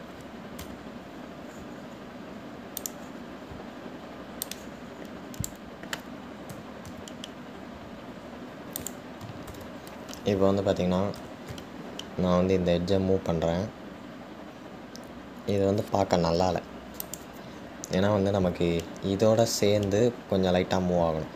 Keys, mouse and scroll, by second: 1.9 Tab, 4.0-5.9 drag.